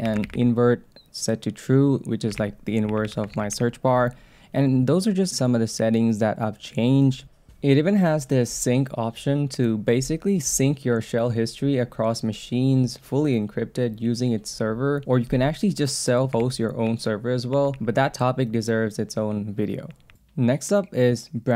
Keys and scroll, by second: 0.2 shift+v, 2.4 ctrl+c, 3.3 shift+v, 7.2 Up, 16.7 Down, 17.5 Down.